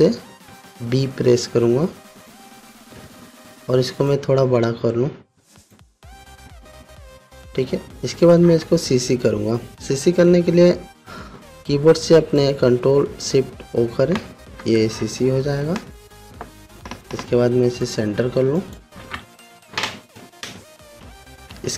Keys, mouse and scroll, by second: 1.1 shift+b, 2.7 click, 4.9-6.5 alt+drag, 14.3 ctrl+shift+o, 18.4 click.